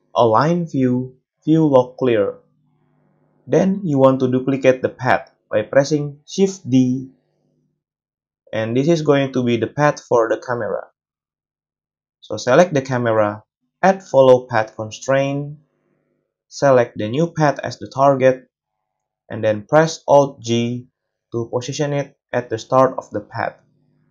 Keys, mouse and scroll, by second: 0.0-1.3 drag, 1.9-3.8 drag, 2.6 space, 3.8 middle click, 3.9-9.1 shift+drag, 6.1 shift+d, 9.1-12.0 middle drag, 12.0 click, 12.0-13.6 middle drag, 16.3-17.0 drag, 17.0-24.1 middle drag, 20.5 alt+g.